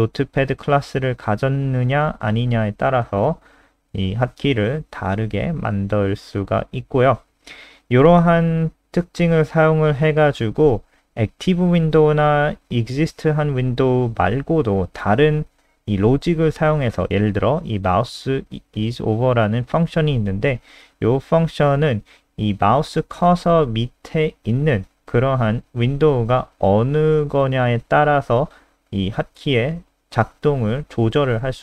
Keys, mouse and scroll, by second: 2.0 scroll down 2, 2.3 ctrl+alt+r, 2.8 click, 8.8 ctrl+c, 9.2 click, 11.4 ctrl+v, 11.9 ctrl+s, 17.9 click, 18.1 click.